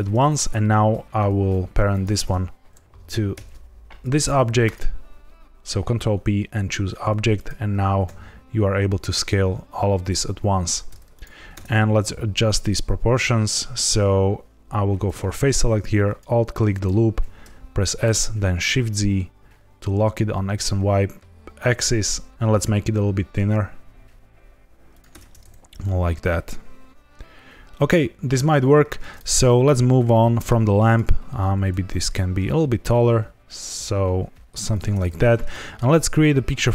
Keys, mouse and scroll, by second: 0.2 click, 1.8 shift+click, 3.5 ctrl+p, 7.3 click, 8.0 s, 10.6 click, 11.1 click, 11.5 Tab, 12.3 scroll up 2, 15.0 click, 16.0 alt+click, 17.1 s, 17.8 shift+z, 24.9 click, 25.0 Tab, 25.4 scroll down 3, 25.8 middle click, 28.7 scroll up 1, 29.1 click, 30.2 middle click, 30.8 click, 31.4 s, 31.5 z, 34.6 click, 35.4 shift+middle click, 36.0 scroll up 1.